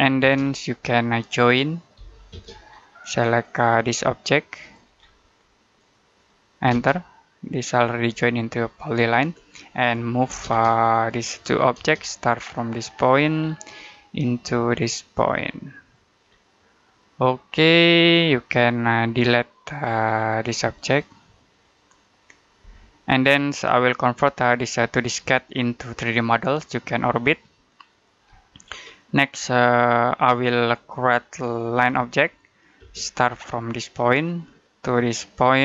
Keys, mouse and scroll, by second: 0.1 space, 0.3-0.6 scroll down 1, 0.6 middle click, 1.8 j, 2.2 space, 2.5-3.3 scroll up 1, 3.3 click, 4.8 scroll down 1, 5.0 middle click, 5.6 click, 6.6 space, 7.7 click, 9.0 Escape, 10.1 m, 10.3 space, 10.6 click, 11.6 space, 12.9 click, 13.2-13.6 scroll down 1, 13.6 middle click, 14.0-15.7 scroll up 1, 15.7 click, 16.1 scroll down 1, 16.4 middle click, 18.1 scroll down 1, 18.3 middle click, 19.0 click, 20.0 middle click, 20.7 click, 22.5 Delete, 23.2-23.8 scroll down 1, 23.8 middle click, 24.2-25.1 scroll up 1, 25.4 middle click, 28.4-29.4 scroll up 1, 29.4 middle click, 31.6 l, 32.6 space, 34.1 click.